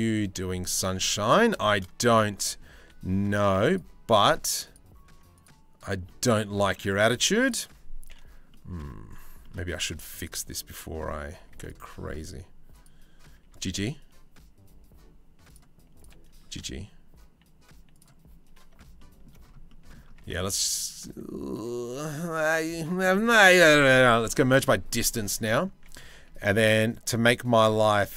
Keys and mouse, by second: 0.9 2, 2.4 3, 3.3 click, 5.0 click, 5.7 click, 6.4 click, 7.1-8.1 alt+drag, 9.1 click, 9.5 2, 9.8-11.1 drag, 11.1 1, 11.2 click, 12.4 click, 13.0 g, 14.1 g, 15.9 g, 18.6 shift+middle click, 19.9 Tab, 20.0 middle click, 21.1-22.2 middle drag, 22.2 click, 22.9 Tab, 23.1 a, 23.9 m, 25.2 click, 25.7 2.